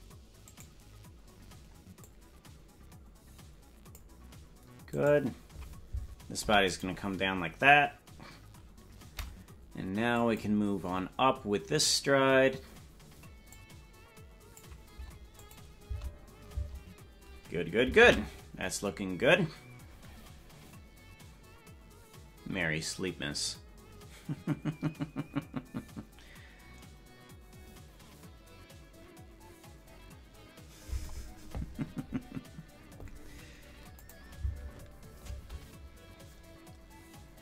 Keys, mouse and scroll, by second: 0.6 right click, 2.0-4.0 drag, 5.0 right click, 6.4 i, 10.2 click, 13.4-14.6 drag, 15.4 click, 34.0 click.